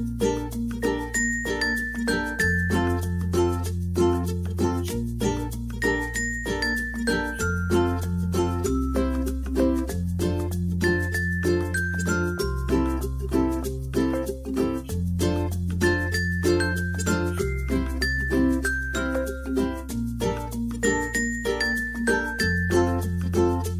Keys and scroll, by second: 15.5 Return, 16.1-17.4 typing.